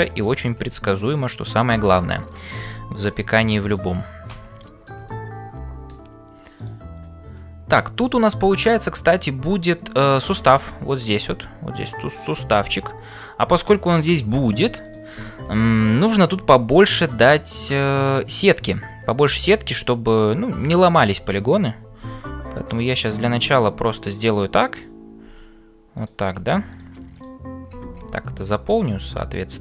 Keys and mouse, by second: 2.0 click, 2.7 f, 4.6 shift+middle click, 5.2 middle click, 6.6 click, 7.8 f, 10.6-12.6 drag, 12.3-29.6 typing.